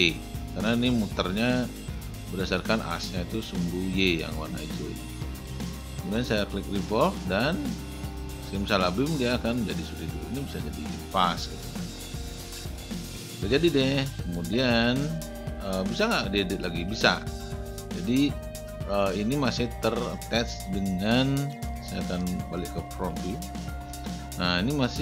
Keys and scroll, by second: 21.1 space.